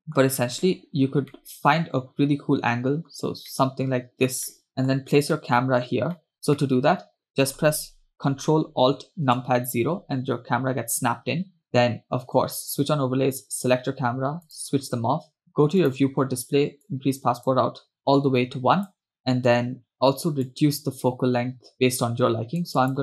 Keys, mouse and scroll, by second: 0.0 middle click, 1.5-3.4 middle drag, 3.7-5.1 shift+middle drag, 5.5 shift+middle click, 6.3 middle click, 6.8 shift+middle click, 11.7 click, 12.8 click, 14.6 click, 15.6 scroll down 1, 16.0 click, 16.3-16.8 scroll down 2, 17.0 click, 18.0-19.1 drag, 20.5-23.0 drag.